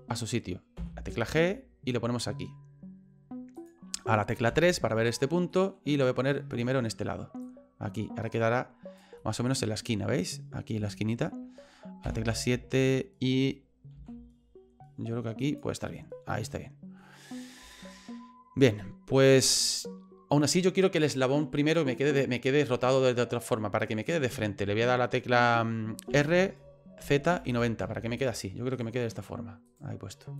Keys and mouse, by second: 0.7 g, 4.5 KP_3, 5.6 middle click, 6.6 middle click, 7.4-9.0 drag, 9.2 middle click, 10.2 middle click, 10.9 shift+middle click, 12.0 KP_7, 13.9 g, 15.9-17.0 middle drag, 17.8-19.5 shift+middle drag, 26.1 r, 28.7 right click, 29.7 right click.